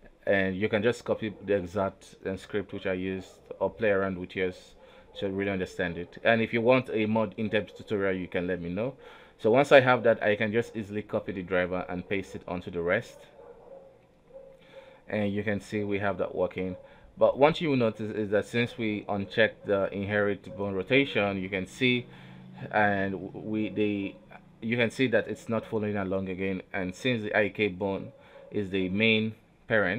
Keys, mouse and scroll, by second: 0.1 z, 1.4 right click, 2.8 a, 3.1 alt+r, 3.3 alt+g, 3.7-4.1 scroll up 2, 4.1 scroll down 1, 4.5 shift+middle click, 5.1 right click, 6.1-7.6 right drag, 8.3-10.8 right drag, 11.0 f, 11.4 g, 12.8 right click, 13.1 g, 14.4 right click, 14.6 r, 17.9 right click, 18.0 r, 19.4 right click, 19.5 r, 21.3 right click, 22.5 click, 24.4 right click, 24.7 g, 25.8 r, 27.5 a, 27.7 alt+r, 28.0 alt+g, 28.5-28.8 scroll up 1, 28.9 alt+a, 29.4 right click, 29.6 scroll down 1, 29.7 scroll up 1.